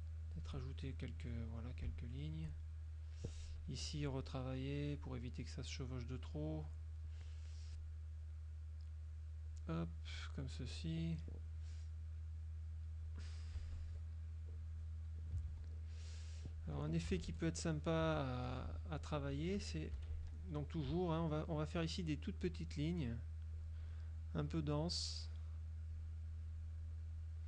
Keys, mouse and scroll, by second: 0.9 shift+click, 2.7 shift+click, 3.8 F2, 4.4 click, 5.8 click, 7.8 click, 9.6-11.0 drag, 12.5 click, 13.6 KP_Subtract, 14.8 click, 15.6 ctrl+s, 15.9 ctrl+click, 16.6 click, 17.2 F6, 18.1 z, 18.6 click, 20.0 F6, 20.2 click, 22.6 shift+click, 23.2 shift+click, 23.6 shift+click, 24.4 shift+click, 24.9 shift+click, 26.0 shift+click, 27.0 shift+click.